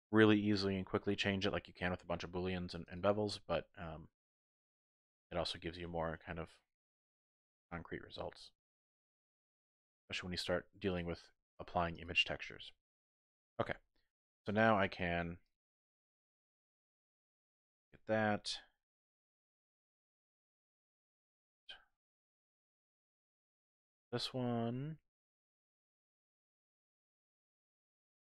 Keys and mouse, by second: 2.8 click, 3.0 typing, 3.2-5.6 middle drag, 6.6 middle click, 6.8 click, 7.1 shift+click, 8.0 click, 8.9 shift+middle click, 10.9 click, 11.0 typing, 11.3 middle click, 12.0 click, 12.5 middle click, 14.4-15.2 typing, 14.6 alt+click, 15.4 alt+shift+click, 16.1-19.6 middle drag, 20.1 middle click, 23.1-26.6 middle drag, 27.3 alt+shift+click, 27.5 typing.